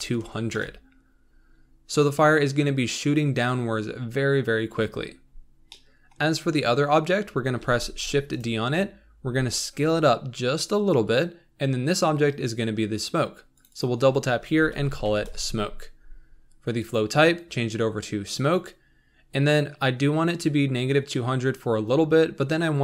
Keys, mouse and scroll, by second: 0.5 KP_0, 2.0-2.4 scroll down 3, 4.7-5.2 scroll up 4, 5.6-7.5 shift+middle drag, 7.5 shift+d, 9.1 s, 13.7-22.8 drag.